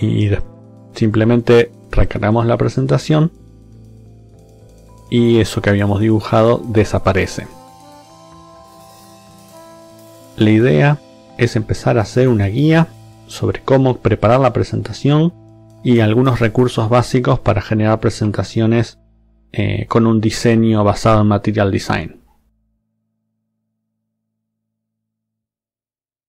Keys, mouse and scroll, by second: 2.0 click.